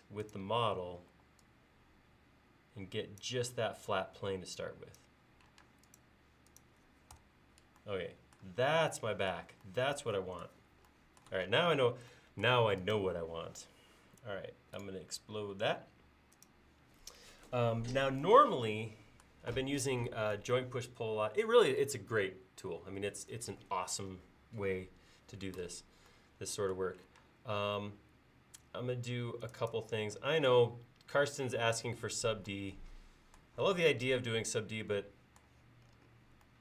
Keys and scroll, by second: 1.2 e, 5.7 space, 7.2 BackSpace, 27.3 space.